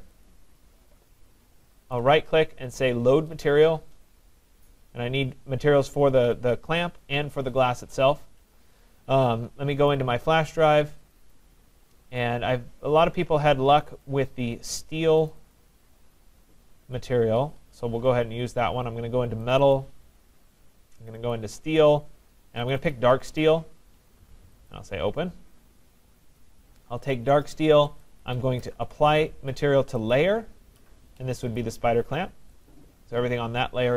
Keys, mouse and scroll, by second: 0.3 click, 2.0 right click, 3.5 click, 3.5 right click, 10.0 click, 11.2 click, 11.4 click, 13.8 click, 14.1 click, 15.3 click, 15.6 click, 17.5 middle click, 17.5 click, 19.6 click, 19.8 click, 21.1 click, 21.3 click, 22.8 click, 22.9 click, 23.4 click, 24.7 click, 26.5 click, 28.0 right click, 30.2 click, 31.6 right click, 32.7 click.